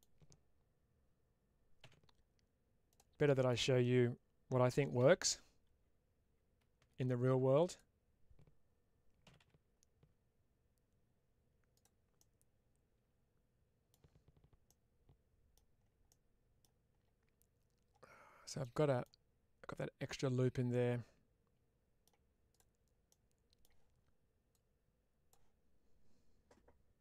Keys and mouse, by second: 2.8 click, 3.1 middle click, 7.6 click, 11.6 click, 12.0-14.2 middle drag, 14.5 middle click, 16.0 middle click, 18.5 middle click, 20.0-22.4 middle drag, 22.4 click, 22.9 middle click, 24.4-25.2 drag.